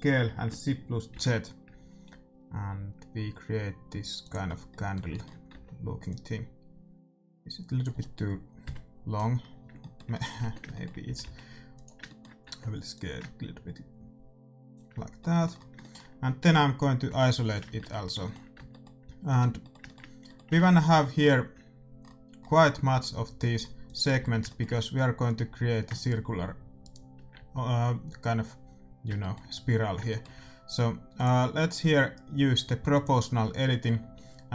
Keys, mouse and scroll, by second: 4.4-6.0 middle drag, 5.5 Tab, 6.0-8.0 drag, 8.6 KP_1, 9.5 middle click, 10.3 Tab, 11.0 s, 12.4 Tab, 12.9-14.9 drag, 15.1 middle click, 17.0 KP_Divide, 18.5 Tab, 19.2 a, 20.6-21.9 middle drag, 20.8 ctrl+r, 24.2 a, 24.4-26.7 middle drag, 26.7-29.1 right drag, 29.1-32.7 middle drag, 31.1-33.0 drag, 33.5-34.5 middle drag.